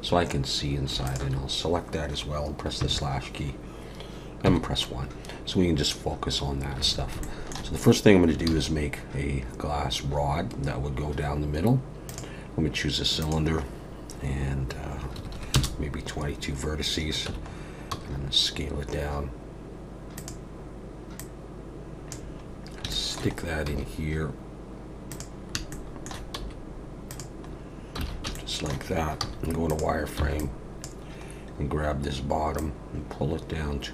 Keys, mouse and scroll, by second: 1.0 shift+click, 2.8 /, 4.4 KP_1, 6.8 alt+a, 7.2 shift+middle click, 8.5 shift+a, 13.2 click, 15.3 2, 17.3 Tab, 17.5-17.9 scroll down 3, 17.9 s, 21.2 click, 22.5 scroll up 3, 22.9 shift+middle click, 23.3-24.2 scroll up 2, 23.6 s, 25.7 shift+middle click, 26.3 s, 27.4 scroll up 2, 28.1 alt+a, 28.3 shift+middle click, 29.2 z, 30.2 b, 31.3 scroll down 1, 32.6 click.